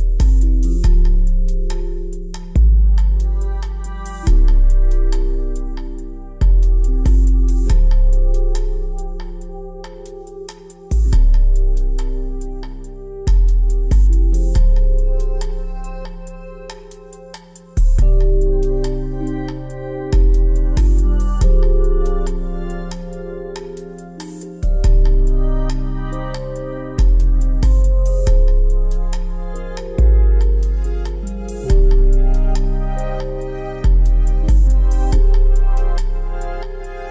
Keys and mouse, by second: 0.4 r, 1.1 g, 5.0 ctrl+z, 5.0-6.6 ctrl+z, 6.7 ctrl+z, 6.9 ctrl+z, 8.7 click, 9.8 a, 14.5-15.9 middle drag, 15.9 KP_3, 18.4 shift+a, 21.1 g, 23.7 g, 26.3 KP_3, 28.2 g, 29.6 g.